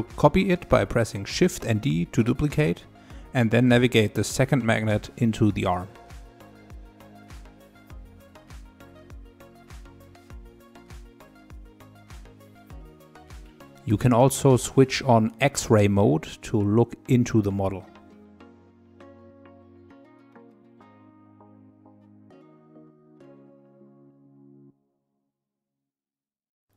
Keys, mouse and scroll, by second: 0.0 click, 2.4 shift+d, 7.1-9.5 typing, 7.3 middle click, 7.4 scroll up 2, 7.5 middle click, 7.9 middle click, 8.0 scroll down 2, 8.3 click, 8.6 middle click, 8.9 middle click, 9.3 middle click, 9.7 middle click, 9.9 click, 9.9 scroll up 3, 9.9-11.0 middle drag, 11.1-11.7 scroll down 3, 11.7 middle click, 12.6 click, 12.7 scroll down 3, 12.8 middle click, 16.3-18.3 drag, 18.3 middle click, 18.3 click, 19.4 click, 19.8 click, 20.0 middle click, 20.8 scroll up 2, 21.0 click, 22.2 click, 22.6 middle click, 23.5 click, 23.8-24.9 middle drag, 24.9 click, 25.4-26.7 middle drag.